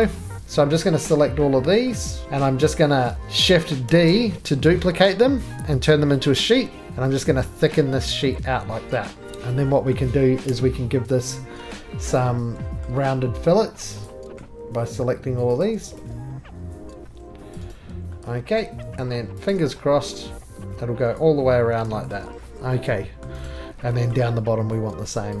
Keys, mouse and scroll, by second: 0.0 shift+click, 1.8 middle click, 2.1-3.0 scroll down 6, 2.2 shift+middle click, 2.2-3.0 scroll up 1, 3.0 middle click, 3.8 d, 4.8 middle click, 5.3 scroll, 6.2 click, 7.5 middle click, 9.2 click, 9.3 click, 9.3 right click, 9.3 middle click, 9.3-9.9 scroll, 9.9 middle click, 10.5 2, 11.3 click, 12.0 middle click, 12.8 shift+scroll, 12.8 middle click, 14.0 shift+click, 14.2 middle click, 14.4 middle click, 14.5 middle click, 14.5 middle click, 14.8-15.2 scroll, 15.6 shift+click, 16.8 shift+middle click, 17.5 click, 17.7 right click, 17.9 middle click, 17.9 middle click, 18.6 middle click, 18.8 middle click, 18.8 2, 19.5 click, 21.1 click, 21.4 middle click, 21.4 middle click, 21.5 middle click, 21.7 middle click, 21.8-22.1 scroll, 23.2 shift+middle click, 23.2 scroll up 11, 23.4 right click, 23.5 scroll down 1, 23.6 scroll up 1, 23.6 scroll down 1, 23.7-24.1 scroll, 24.1 middle click, 25.1 click.